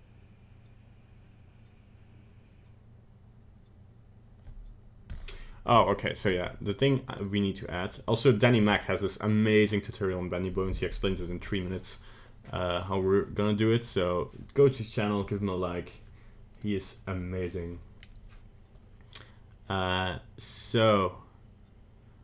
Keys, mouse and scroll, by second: 6.2-7.2 scroll up 1, 7.2 click, 8.2 click.